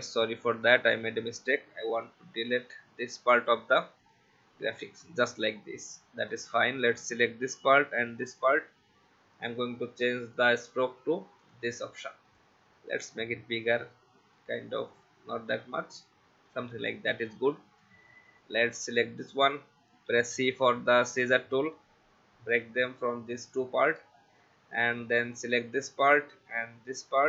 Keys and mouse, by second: 0.1 ctrl+z, 0.3 ctrl+z, 2.1 alt+click, 4.8 v, 5.2 click, 8.0 shift+click, 9.3 click, 11.4 click, 16.5 click, 18.9 click, 20.1 c, 23.5 click, 24.0 v, 24.3 click, 25.6 click.